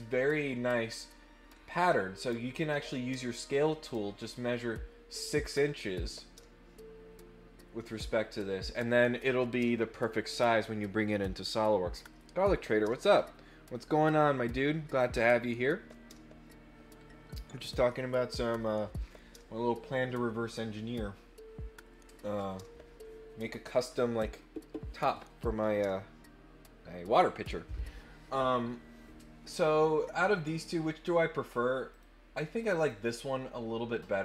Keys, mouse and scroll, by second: 29.8 middle click, 29.8 scroll down 2, 31.9 click, 32.6 click, 32.7 click.